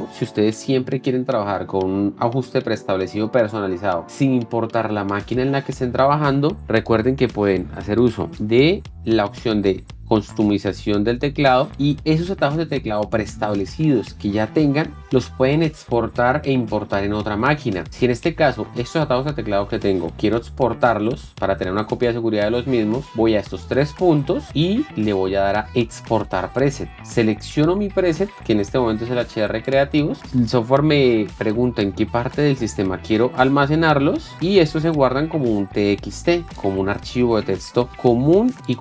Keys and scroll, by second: 37.9 super+e.